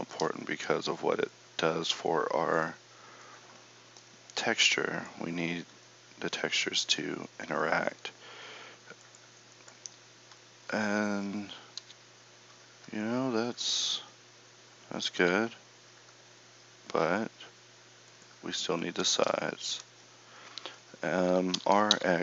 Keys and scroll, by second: 11.9 a, 15.1 KP_Divide, 21.6 r.